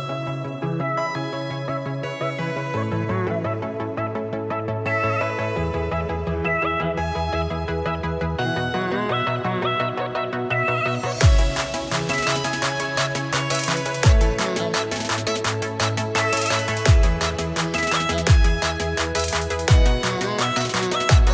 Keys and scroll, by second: 0.0 space, 1.6 -, 2.5 space, 3.8 space, 5.0 space, 6.6 space, 7.1 space, 7.8 space, 8.1 space, 10.2 space, 10.8 space, 12.1 space, 13.2 -, 16.2 -, 16.4 space, 16.5 space, 17.8 z, 17.8 space, 18.6 r, 18.7 space, 20.7 space.